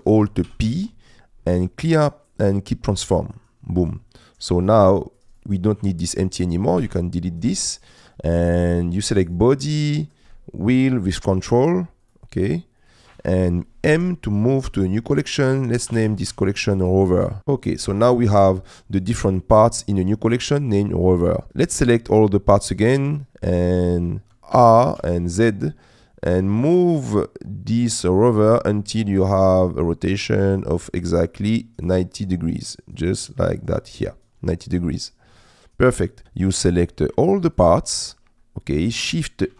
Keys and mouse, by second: 0.5 alt+p, 5.3 click, 6.9 Delete, 9.3 click, 10.8 ctrl+click, 12.0 ctrl+click, 12.5 ctrl+click, 12.8 ctrl+click, 13.9 m, 19.0 click, 23.6 middle click, 24.6 r, 25.0 z, 35.6 middle click, 36.7 click, 38.6 click.